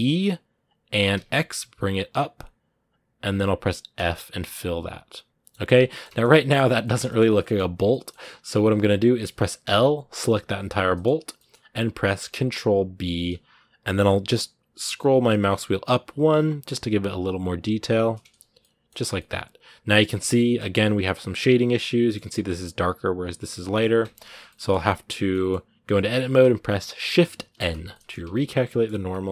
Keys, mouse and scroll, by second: 4.0-5.6 middle drag, 5.6 Tab, 5.7-7.0 shift+middle drag, 7.0 scroll up 2, 7.2 middle click, 7.5 Tab, 7.7 middle click, 8.5 right click, 9.4 l, 10.2-12.0 middle drag, 12.0 ctrl+b, 18.4 middle click, 18.6 scroll down 1, 18.9 middle click, 19.9 scroll up 2, 20.1-23.7 middle drag, 23.7 scroll up 1, 23.8 Tab, 24.3-27.4 middle drag, 27.4 shift+n, 27.7 middle click, 28.0 Tab, 28.1 scroll down 1, 28.2-29.3 middle drag.